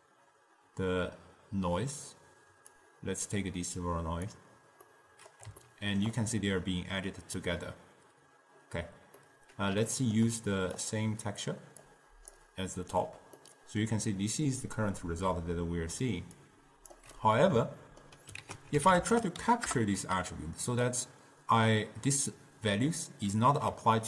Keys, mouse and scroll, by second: 2.9 click, 5.0-8.8 middle drag, 9.4-10.9 middle drag, 10.9-13.5 drag, 13.5-16.5 middle drag, 16.5 click, 17.4-18.5 middle drag, 17.9-18.5 scroll down 2, 18.5 ctrl+a, 23.4 middle click, 24.0 scroll down 2.